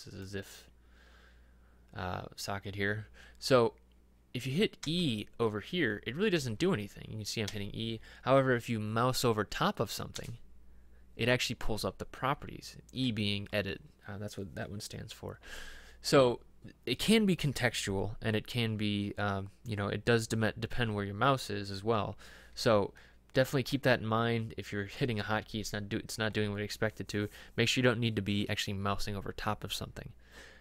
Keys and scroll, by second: 4.9 e, 6.4 e, 7.6 e, 10.2 e.